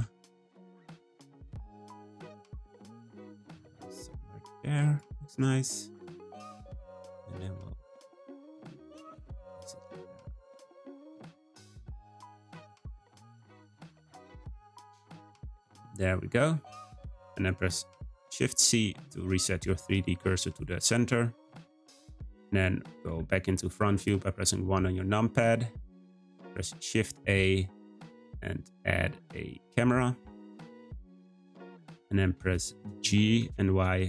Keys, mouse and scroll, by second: 0.6 g, 2.0 g, 5.2-7.4 middle drag, 7.4 g, 8.5-9.8 middle drag, 9.8 g, 11.2 middle click, 11.8 `, 13.4 g, 14.6 middle click, 14.9 scroll down 1, 15.0 scroll up 1, 15.1-15.5 scroll down 1, 15.5-16.8 middle drag, 16.8 click, 17.1 scroll down 1, 17.2-17.9 middle drag, 17.9 shift+c, 19.1-21.1 scroll down 4, 21.2-21.8 shift+middle drag, 21.8-23.0 scroll up 1, 23.0 `, 26.3 shift+a, 31.6-32.2 middle drag, 32.2 scroll down 2, 32.5-33.2 shift+middle drag, 33.2 g.